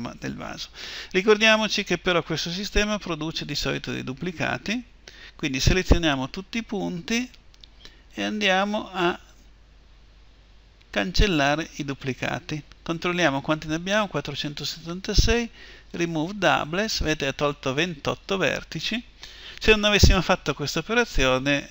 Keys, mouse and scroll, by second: 1.1 middle click, 3.3 a, 4.5 a, 7.9-11.1 drag, 15.7-17.8 drag.